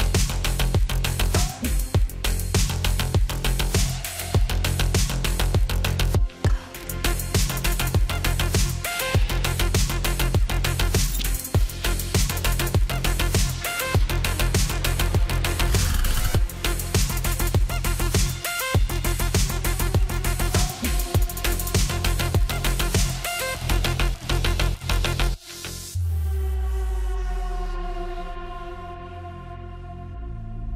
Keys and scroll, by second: 3.4 ctrl+z, 8.5-9.9 typing.